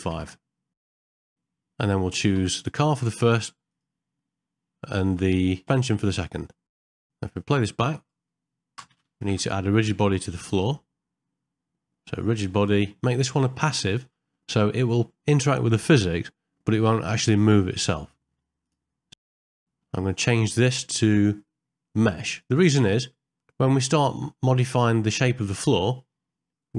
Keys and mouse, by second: 1.1 shift+middle click, 6.8 middle click, 6.9 shift+middle click, 7.0 middle click, 7.9 space, 9.3 shift+Left, 10.1 click, 12.2 click, 13.1-18.7 drag, 19.5 ctrl+middle click, 19.6 shift+middle click, 21.1-22.5 drag, 24.0 ctrl+middle click, 24.4 middle click.